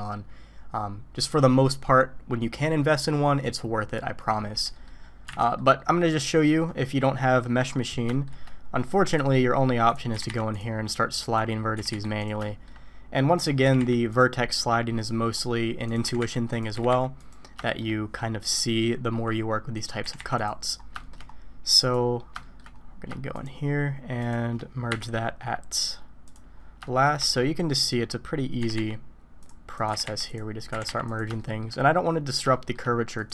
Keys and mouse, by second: 4.7 click, 4.9 middle click, 5.4 alt+a, 5.4 middle click, 8.1 shift+middle click, 9.1 click, 10.1 g, 11.3 click, 11.7 g, 12.4 shift+middle click, 13.3 click, 13.6 g, 15.9 click, 16.0 g, 16.7 g, 17.6 shift+click, 19.7 click, 20.0 g, 21.0 shift+middle click, 22.4 shift+middle click, 23.3 shift+click, 24.2 shift+click, 24.9 m, 26.8 shift+middle click, 27.8 middle click, 28.6 g, 29.7 click, 29.9 g, 30.7 g, 31.4 shift+middle click, 32.5 shift+click.